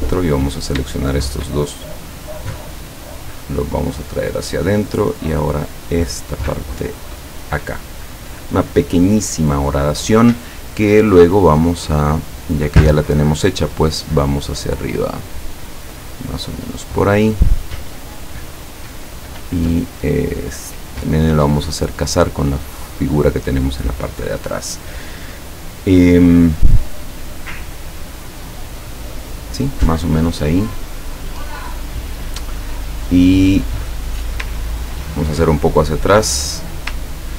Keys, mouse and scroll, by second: 0.4 click, 1.1 shift+click, 2.8-4.6 drag, 4.9 click, 5.5-8.2 drag, 12.1 click, 12.7 click, 14.1-15.9 drag, 16.1 click, 16.7 click, 19.2 click, 20.0 click, 21.5-23.5 drag, 34.8 ctrl+scroll down 2, 35.7 ctrl+click, 36.6 click, 36.8-37.3 scroll down 4.